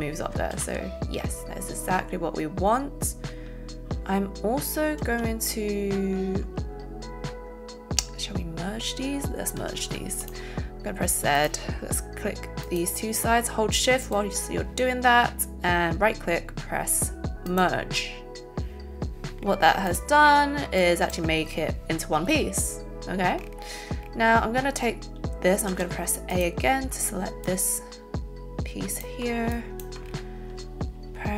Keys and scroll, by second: 0.5 ctrl+z, 9.6 z, 25.7 a.